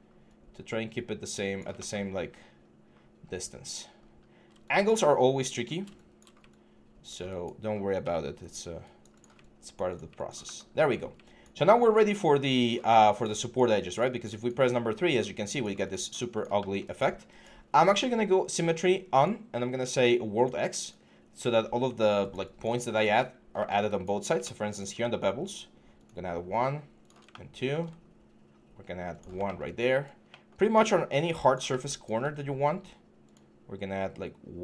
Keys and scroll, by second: 4.9 6, 11.8 3.